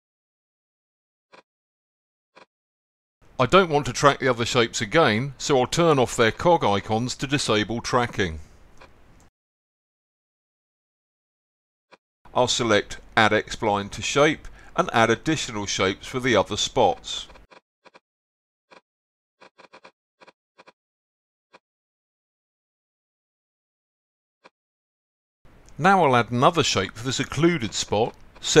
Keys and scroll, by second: 7.1-8.2 typing.